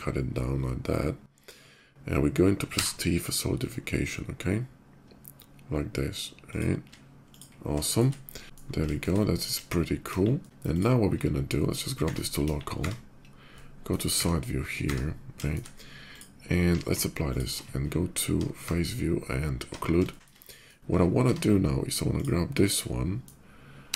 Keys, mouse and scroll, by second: 1.7 e, 2.6 t, 3.2 t, 6.2 click, 7.0 shift+click, 7.6 middle drag, 8.1 click, 8.4 shift+2, 8.6 shift+middle drag, 8.9 shift+middle drag, 9.3 KP_5, 10.0 KP_5, 10.2 middle drag, 10.5 click, 11.2 /, 12.5 KP_5, 13.2-13.6 middle drag, 15.2 shift+middle drag, 15.7 click, 16.4 q, 16.9 ctrl+click, 17.3 ctrl+q, 17.5 Tab, 17.9 Tab, 18.1 Tab, 19.8 shift+middle click, 21.8 click, 23.6 g.